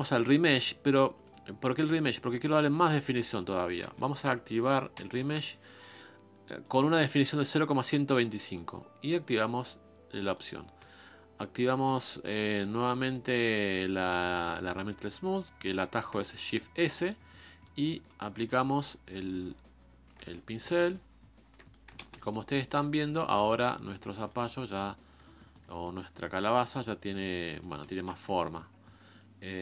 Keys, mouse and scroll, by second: 10.3-14.9 middle drag, 14.9-18.2 drag, 18.2 middle click, 18.6-20.2 shift+drag, 20.2 middle click, 20.9 shift+click, 21.7 middle click, 22.0 ctrl+space, 22.2 middle click, 22.9 shift+click, 23.3-24.4 middle drag, 24.4 scroll down 1, 24.5 scroll up 1, 24.8 shift+click, 25.7-27.6 middle drag, 27.6 click, 28.0 f, 28.6-29.2 scroll up 2, 29.2-29.6 drag.